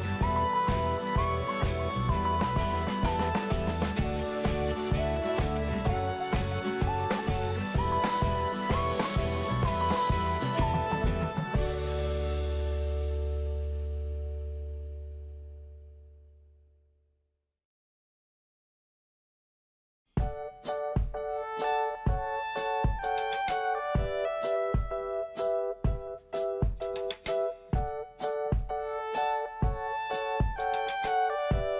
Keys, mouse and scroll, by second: 7.7 9, 10.3 click, 18.8 middle click, 20.1 click, 24.0 scroll down 1, 29.2 scroll up 1, 31.0 scroll down 1.